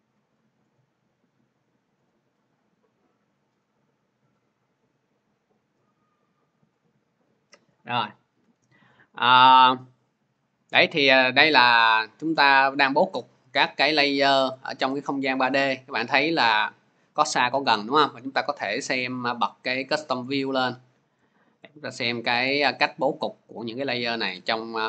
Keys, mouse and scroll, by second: 1.1-6.3 drag, 10.6 click, 12.2 click, 13.0 click, 13.9-15.6 scroll, 16.0-17.3 scroll, 18.9 click, 19.8 click, 20.6 scroll, 21.4-22.0 scroll, 22.7-23.2 scroll, 23.2-24.1 scroll, 24.7 c.